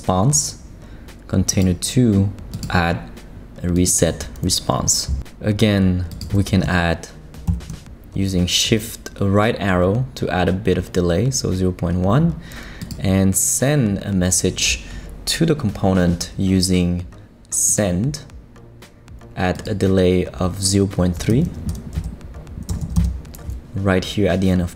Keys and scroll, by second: 7.5 shift+Right, 22.7 BackSpace, 22.8 3, 22.9 Return.